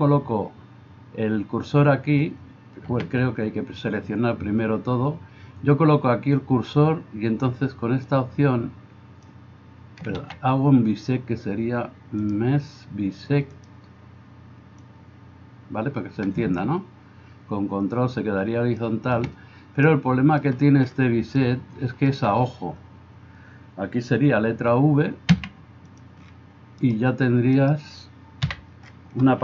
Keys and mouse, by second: 2.9 a, 10.3 ctrl+z, 25.4 v, 26.0-27.5 middle drag, 27.5 click, 27.9-29.4 middle drag.